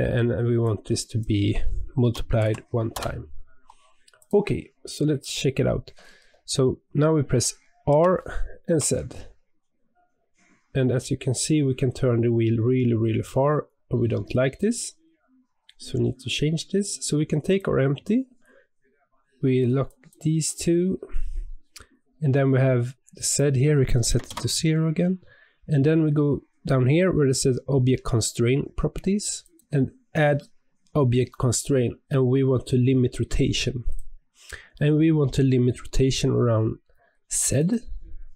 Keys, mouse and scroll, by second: 4.1 click, 4.8 click, 7.8 r, 19.8 click, 20.4 click, 23.2-26.3 drag, 29.4 click, 29.5-30.0 drag, 37.5 click.